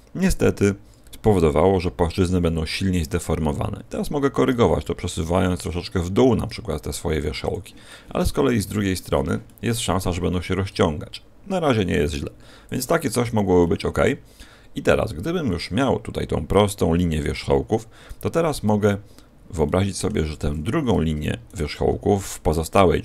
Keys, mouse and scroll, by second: 4.4 g, 7.4 click, 7.8 middle click, 8.5 middle click, 9.4 middle click, 10.6 g, 13.0 click, 13.0-13.5 scroll down 5, 13.5 middle click, 14.7 scroll down 1, 15.4 scroll down 1, 18.1 Escape, 18.6 a, 19.2-19.6 scroll down 3, 19.6 shift+middle click, 21.4 alt+shift+right click.